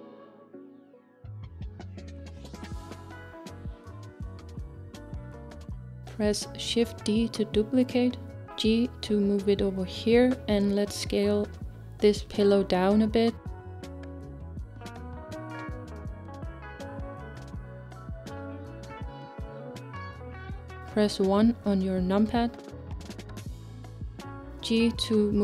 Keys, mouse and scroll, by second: 3.1 r, 7.7 shift+d, 9.8 r, 9.8 r, 21.9 KP_1, 23.3-25.4 scroll up 4.